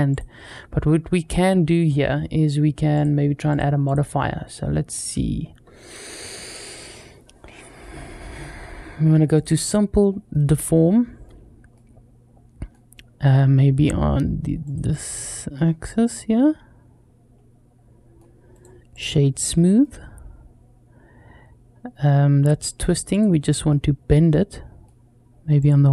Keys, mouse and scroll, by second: 2.7 click, 3.3 click, 3.7-9.2 drag, 10.1-11.1 middle drag, 11.6-12.6 middle drag, 14.5 click, 15.4-18.0 middle drag, 18.3 right click, 19.6-22.3 middle drag, 22.9 click, 23.5-24.7 middle drag, 25.4 click.